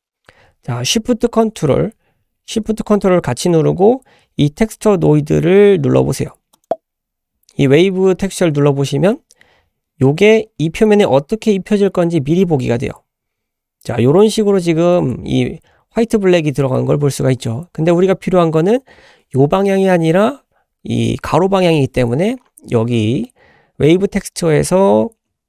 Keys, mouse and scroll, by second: 6.7 ctrl+shift+click, 12.6-13.6 scroll down 3, 17.3-17.9 scroll up 3, 22.5-22.8 scroll up 3, 22.9 middle click.